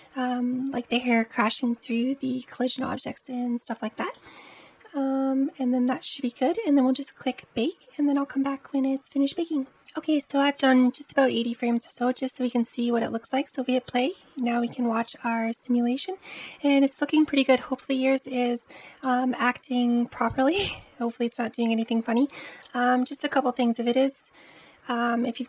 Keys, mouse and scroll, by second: 3.5-5.9 middle drag, 5.9-7.0 scroll down 10, 7.0-9.5 scroll down 7, 9.7-10.2 scroll down 3, 10.2-12.2 middle drag, 12.2 space, 16.1 space, 16.2-16.9 middle drag, 16.9-17.4 scroll up 1, 17.4-20.2 middle drag, 20.2-20.7 scroll down 1, 20.7 space, 21.6 space, 22.5-25.4 middle drag.